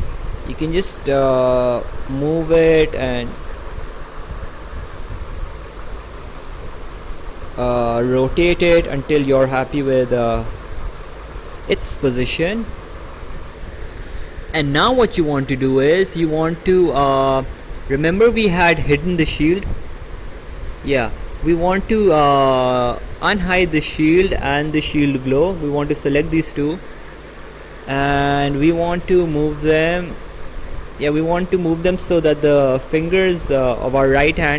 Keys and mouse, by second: 1.8 click, 4.6 click, 8.5 click, 10.1 click, 19.3 click, 21.3 click, 23.1 click, 24.5 click, 25.8 ctrl+click, 28.9 click.